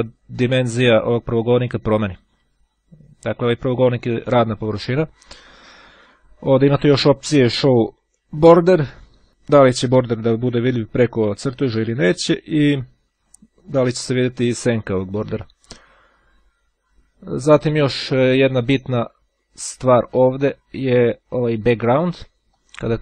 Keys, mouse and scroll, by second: 0.2-0.8 scroll down 2, 2.6 ctrl+scroll up 2, 7.3 click, 8.7 click, 13.2 click, 14.4 click, 16.9 scroll up 2, 22.2-23.0 drag.